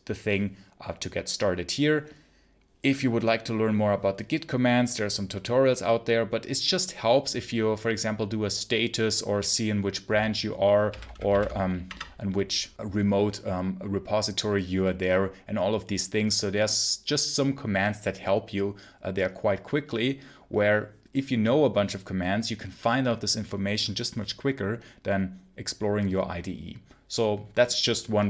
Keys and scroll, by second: 10.5-11.7 typing, 11.7 Return.